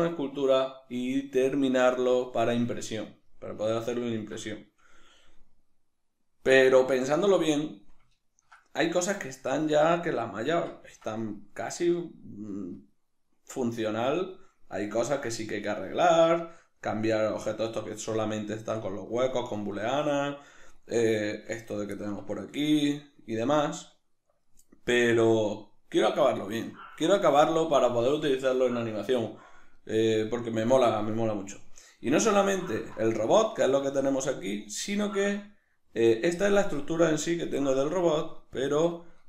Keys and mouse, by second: 3.3-17.1 middle drag, 17.1-17.4 right drag, 17.4-20.4 middle drag, 20.4-21.1 right drag, 21.1-21.6 shift+middle drag, 21.6 right click, 22.0-38.6 ctrl+middle drag, 33.8 a, 38.6-39.2 drag.